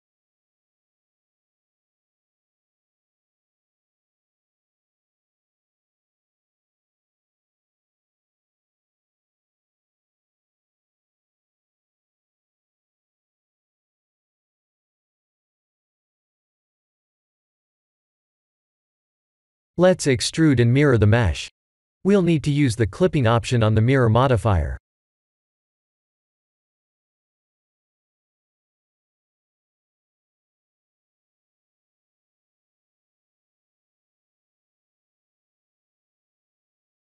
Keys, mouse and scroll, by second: 2.5 middle click, 3.8 ctrl+r, 6.4 KP_3, 7.4 shift+z, 7.9 scroll up 4, 8.3 shift+middle click, 9.5 g, 11.5 middle click, 12.2 middle click, 12.6 shift+z, 12.8 middle click, 13.1 middle click, 13.5 middle click, 14.0-14.6 scroll down 1, 14.6 click, 14.6 scroll down 2, 15.4 3, 15.5 click, 16.0 shift+click, 16.3 shift+click, 16.5 scroll down 1, 16.6 middle click, 16.9 middle click, 17.4 shift+click, 17.8 middle click, 18.2 middle click, 18.7 KP_1, 19.8 e, 27.5 Tab, 28.8 click, 32.4 ctrl+a, 34.8 Tab, 35.3 a, 36.6 click.